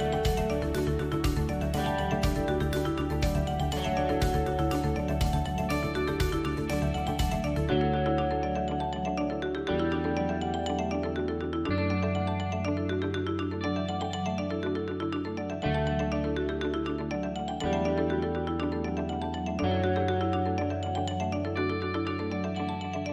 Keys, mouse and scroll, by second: 0.0 l, 0.3 KP_1, 1.7 click, 3.5 click, 3.7 middle click, 4.9 click, 5.4 KP_3, 5.9-6.8 scroll down 1, 6.8 KP_7, 7.5 shift+middle click, 8.7 click, 9.5 ctrl+z, 10.4 e, 19.4 e, 22.3 click, 22.9 KP_3.